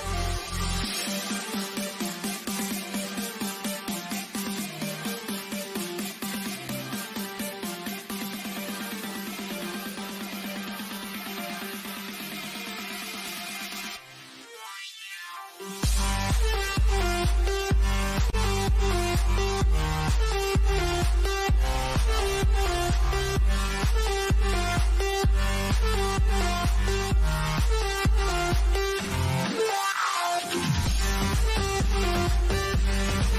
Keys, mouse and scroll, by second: 2.8 click, 9.0 scroll up 1, 14.6 click, 18.7 click, 22.8 g, 23.7 click, 26.0 click, 29.9 click.